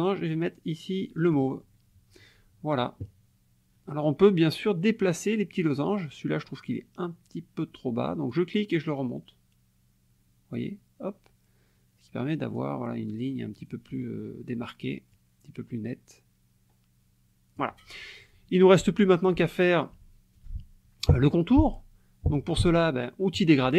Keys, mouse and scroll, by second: 1.3 click, 8.3 click, 15.1-17.8 drag, 23.4 click.